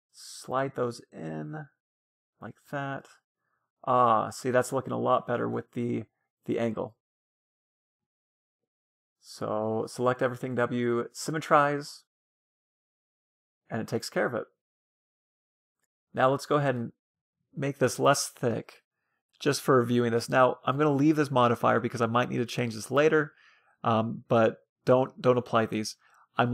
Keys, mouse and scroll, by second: 1.9 Tab, 2.1-6.0 middle drag, 6.2 middle click, 8.4 Tab, 8.8 a, 8.9 a, 9.6 w, 11.0 Tab, 11.3-15.4 middle drag, 15.8-17.8 drag, 17.5-19.6 middle drag, 19.8 middle click, 19.8-20.5 scroll down 1, 23.1-26.5 middle drag.